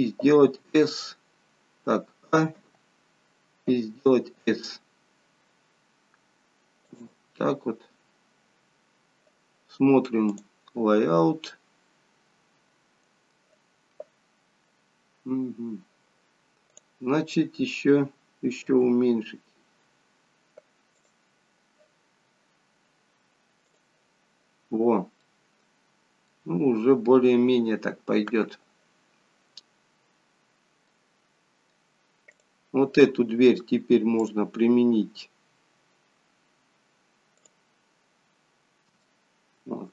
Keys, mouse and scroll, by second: 10.5 click, 11.5-12.0 scroll up 2, 12.0 scroll down 1, 12.1-12.4 scroll down 3, 12.4-13.2 scroll up 2, 24.0 click, 24.7-25.2 scroll up 2, 25.2 middle click, 26.5-27.8 scroll down 2, 27.8 scroll down 1, 29.8-30.4 scroll down 2, 30.9 middle click, 30.9 scroll down 1, 32.3 click, 38.5-39.0 scroll up 2, 39.0 shift+middle click.